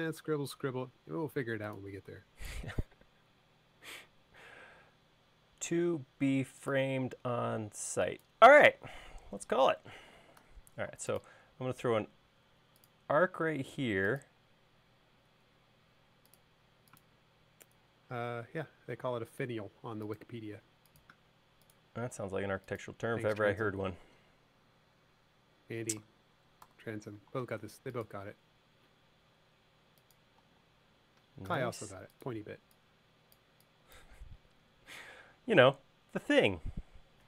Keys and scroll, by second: 10.6 a, 15.1 l, 26.9 c, 30.7 l, 32.7 e, 35.8 l.